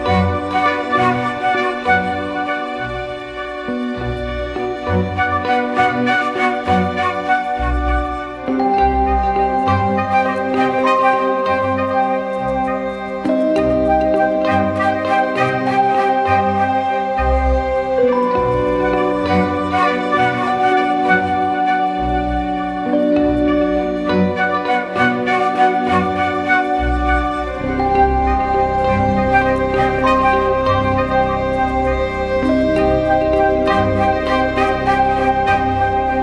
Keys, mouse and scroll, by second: 0.9 Return, 12.0 double click, 15.5 ctrl+-, 15.9 ctrl+-, 17.1 ctrl+t, 18.1 alt+shift+click, 23.6 Return, 33.1 double click, 34.4-34.9 typing.